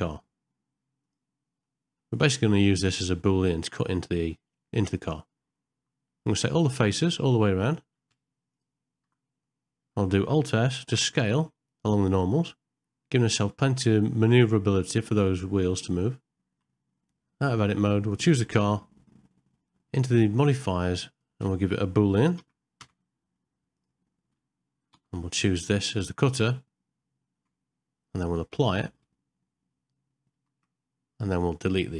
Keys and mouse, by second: 1.7 middle click, 2.3 ctrl+middle click, 2.9 shift+middle click, 5.1 ctrl+middle click, 6.3 alt+click, 9.5 middle click, 10.8 alt+s, 15.5 middle click, 16.0 ctrl+middle click, 16.1 shift+middle click, 17.1 middle click, 20.1 click, 21.1-23.9 drag, 30.5 ctrl+a, 31.4 click.